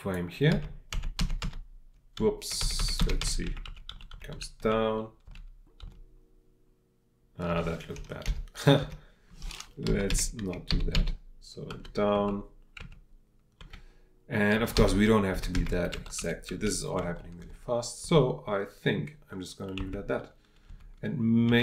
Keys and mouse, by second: 16.5 Right.